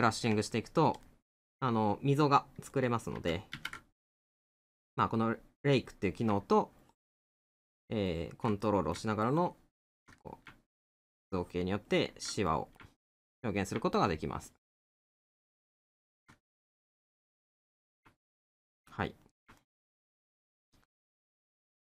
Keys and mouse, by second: 0.5 middle click, 8.6 middle click, 10.2 middle click, 12.5 middle click, 16.4 middle click, 18.8 middle click.